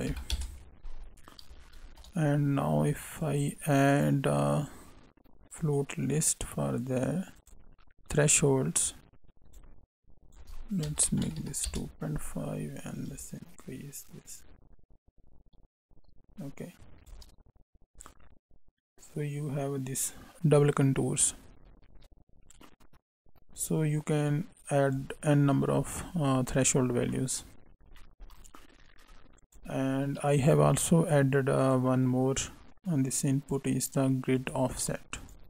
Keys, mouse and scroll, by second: 1.8 shift+a, 8.4 click, 10.2 click, 13.1 click, 17.9 click, 26.3 scroll down 2, 27.1 middle click, 27.5 scroll up 1, 27.9 middle click, 29.4 click, 30.5 u.